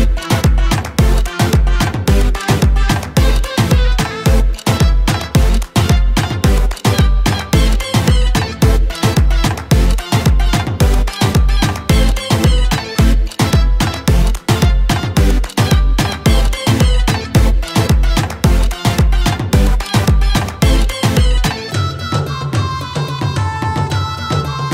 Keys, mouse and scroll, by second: 2.1-11.1 drag, 11.1 shift+5, 13.5 click, 15.2-24.7 shift+drag.